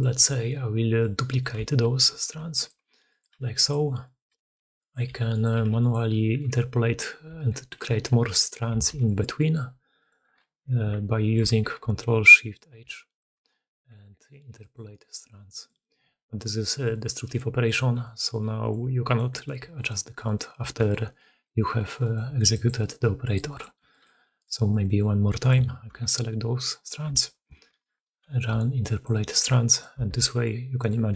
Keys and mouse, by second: 0.1 4, 0.4-0.9 drag, 1.2 click, 1.5 shift+drag, 2.1 shift+d, 2.7 r, 3.2 g, 3.7 click, 4.4 shift+d, 5.0 r, 5.4 g, 6.6 4, 7.2 4, 7.7 4, 8.6 4, 10.5-11.3 middle drag, 11.4-11.9 ctrl+shift+middle drag, 12.5-15.2 ctrl+shift+middle drag, 12.9 ctrl+shift+h, 15.6-18.7 middle drag, 17.2-23.7 typing, 24.1 middle drag, 27.1 4, 27.7 ctrl+shift+h, 30.0 alt+a.